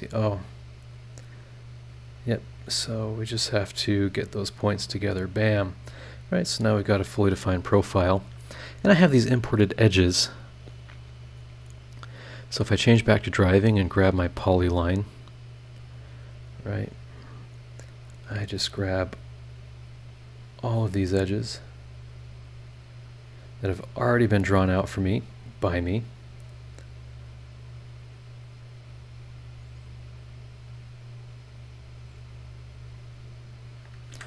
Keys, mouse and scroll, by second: 0.2 scroll up 1, 0.9-2.7 drag, 3.1 click, 3.9 click, 4.7 click, 5.1 click, 5.4-6.3 scroll down 6, 6.5 scroll up 2, 7.2-7.5 scroll up 2, 11.5 click, 13.2 click, 14.3 click, 15.7 click, 17.4 click, 17.7 scroll down 2, 18.2-18.9 scroll up 4, 20.4 click, 20.8 scroll down 1, 22.6 click, 23.0-23.6 scroll down 2, 23.8-24.4 scroll up 2, 26.0 click, 26.4 scroll down 1, 26.9 scroll up 1, 28.8 click, 29.1 scroll down 1, 29.7-30.0 scroll up 1, 32.3 click, 33.5 click, 34.1 Escape.